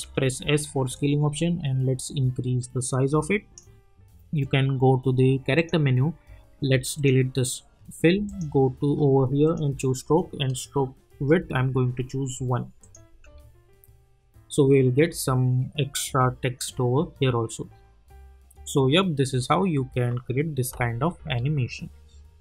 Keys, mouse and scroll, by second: 0.0 s, 0.9-5.5 drag, 11.1 Return, 12.8 click, 13.1 space.